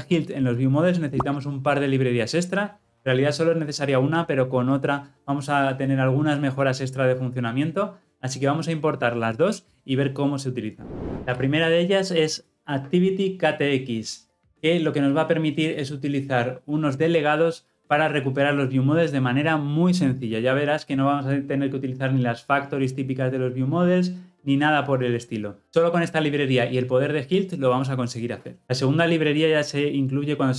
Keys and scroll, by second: 11.1 ctrl+v.